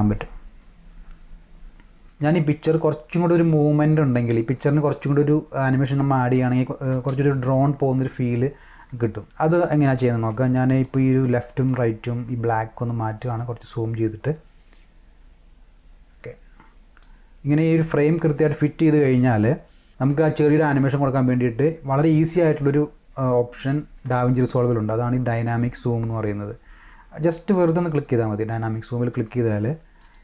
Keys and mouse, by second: 1.6 drag, 2.0 space, 6.9 space, 9.1 space, 9.3 space, 9.5 click, 9.7 space, 10.3 space, 10.7 click, 13.2-17.0 drag, 27.9 click, 30.0 click.